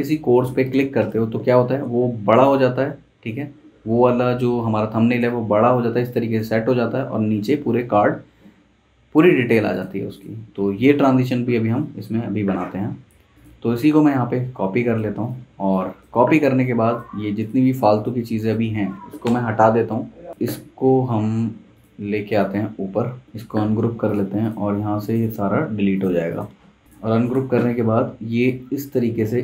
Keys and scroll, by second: 1.0 super+Return, 15.4 z, 15.6 z, 16.3 v, 19.2 BackSpace.